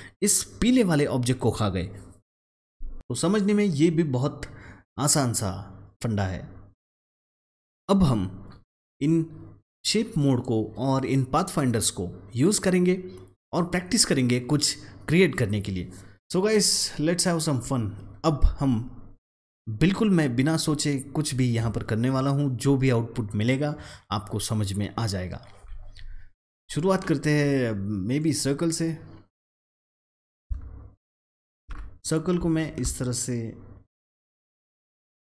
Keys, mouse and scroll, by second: 2.9 click, 28.1-30.4 drag, 30.4-31.7 alt+drag, 31.7 ctrl+z, 32.5-35.2 alt+drag.